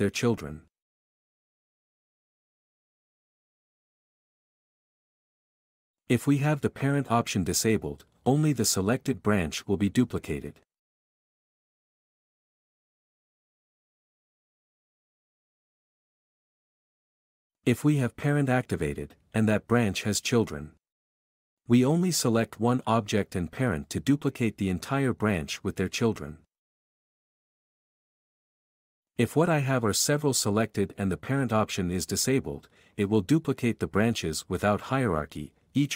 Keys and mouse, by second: 1.1 k, 3.5-6.1 typing, 6.4 Escape, 10.8 k, 13.3 k, 14.8 k, 18.0 k, 21.1 k, 24.0 q, 28.0 ctrl+click, 28.6 x, 29.5 q, 29.9 click, 30.9 b.